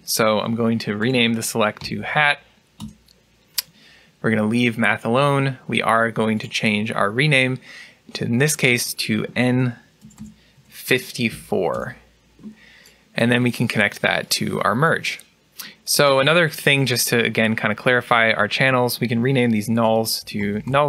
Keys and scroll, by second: 0.8 BackSpace, 1.9-2.6 typing, 9.9 BackSpace, 19.6 BackSpace.